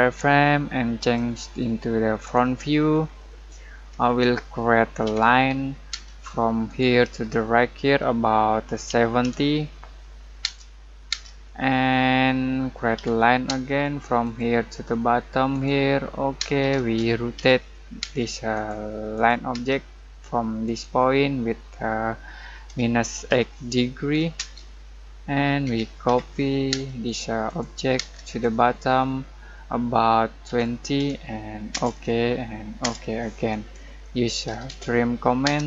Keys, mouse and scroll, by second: 3.0-3.5 scroll down 1, 3.5-5.0 middle drag, 5.0 l, 5.9 space, 8.6-10.4 typing, 11.4 middle click, 11.8-12.9 scroll up 1, 12.9 l, 13.4 space, 14.2 click, 16.3-18.0 typing, 18.5 click, 19.5 space, 20.6 click, 22.6-23.2 typing, 24.3 space, 25.6-26.7 typing, 27.0 click, 27.9 space, 28.2 click, 30.4-30.9 typing, 31.7 Return, 34.2-35.4 typing.